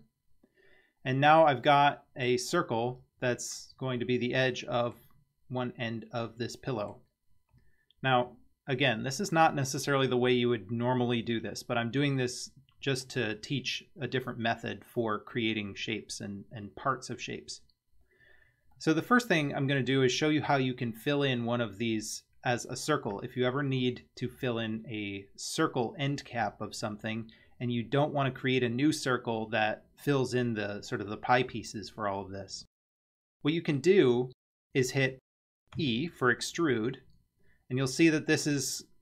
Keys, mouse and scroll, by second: 1.1-2.3 middle drag, 4.0-5.1 middle drag, 6.3-7.0 middle drag, 12.2-13.2 middle drag, 14.3-14.9 scroll up 1, 17.9-18.8 scroll up 1, 18.8-19.9 middle drag, 35.8 e.